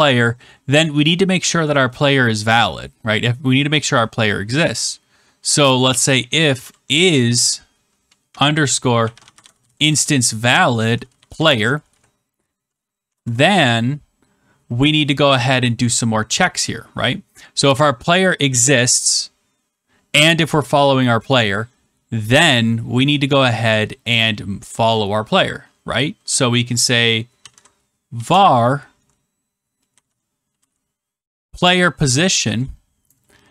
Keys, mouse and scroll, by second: 5.5-7.0 typing, 8.2-13.5 typing, 27.1-33.0 typing.